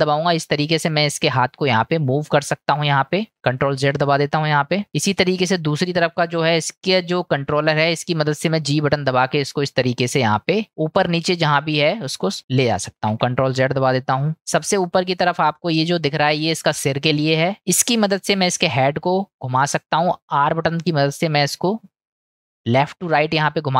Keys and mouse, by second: 4.1 ctrl+z, 4.9 middle click, 6.2 click, 13.1 ctrl+z, 14.5-15.1 middle drag, 15.8 click.